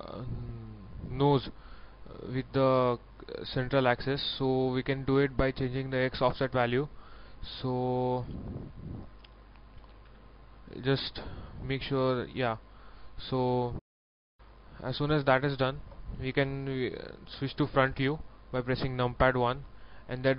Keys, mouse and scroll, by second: 1.6 scroll down 1, 3.9-5.2 scroll up 1, 6.6 click, 7.2-7.7 scroll up 1, 8.6 click, 14.1 scroll down 1, 15.2 shift+middle click, 17.2 shift+KP_1, 18.8 scroll up 1, 19.7 scroll down 1.